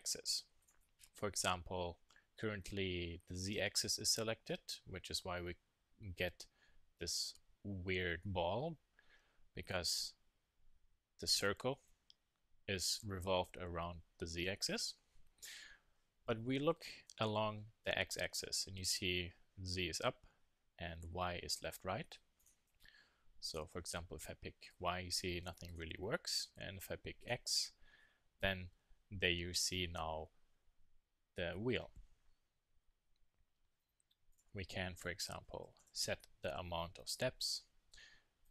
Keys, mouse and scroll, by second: 0.6 click, 11.4-14.3 middle drag, 14.3 KP_1, 14.6 KP_3, 22.4-24.1 drag, 25.7-27.4 drag, 34.3-36.1 drag, 38.4-38.5 drag.